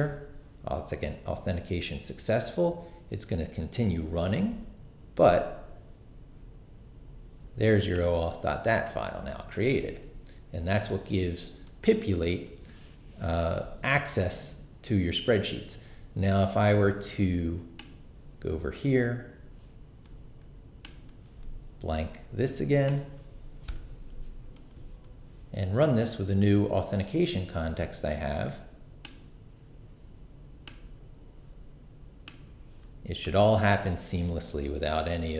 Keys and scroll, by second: 23.7 shift+BackSpace, 24.2 BackSpace.